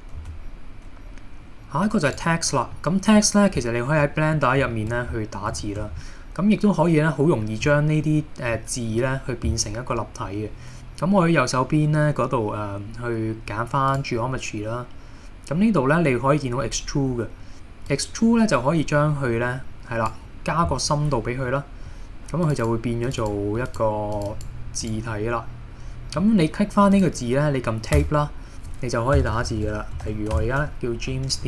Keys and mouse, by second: 0.2 shift+a, 2.7 middle click, 4.0-4.5 middle drag, 4.7 shift+middle click, 5.7 shift+middle click, 6.0-7.6 middle drag, 7.8 shift+middle drag, 8.6 middle click, 13.9 click, 18.0-20.1 drag, 21.5-22.0 middle drag, 23.2 click, 24.1 click, 26.2 middle drag, 26.9 click, 28.0 Tab, 29.2-31.4 typing.